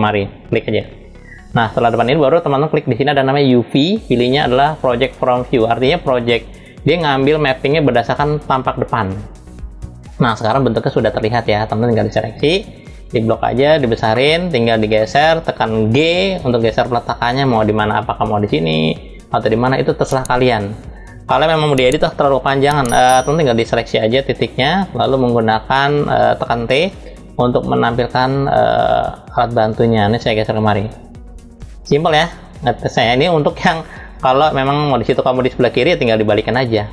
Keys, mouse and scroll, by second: 0.4 click, 3.2-9.1 drag, 11.7-12.8 drag, 13.1 scroll up 1, 13.7 middle click, 15.6 g, 23.4-24.2 drag, 26.0 t, 27.2-31.8 drag, 33.8 click, 36.7-36.9 drag.